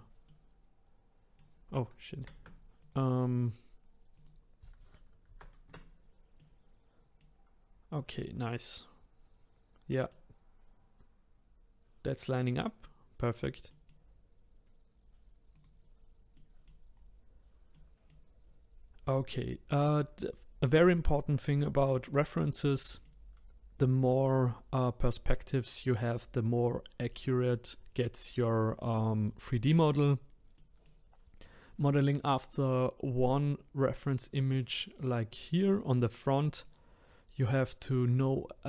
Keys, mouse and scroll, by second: 0.3-2.2 middle drag, 2.2 ctrl+z, 2.8 click, 4.1-6.4 drag, 6.4-7.7 middle drag, 7.7-8.2 scroll up 1, 8.2-11.2 middle drag, 12.6-15.5 middle drag, 15.5 click, 16.3 middle click, 16.9-17.7 scroll down 1, 17.7-23.8 middle drag, 23.8-26.1 scroll up 3, 30.5-33.6 middle drag, 34.5 click, 35.5-36.6 middle drag, 36.6 click.